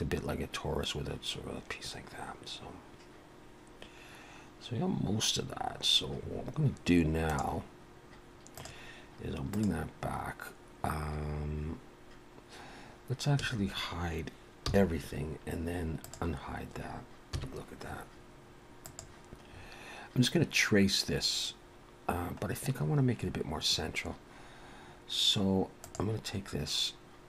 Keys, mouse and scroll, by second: 8.6 click, 9.5 click, 13.4 a, 14.6 h, 16.0 click, 17.3 KP_1, 18.8 click, 19.5 scroll up 3, 21.6 scroll down 1, 22.4 scroll up 1, 25.8 click.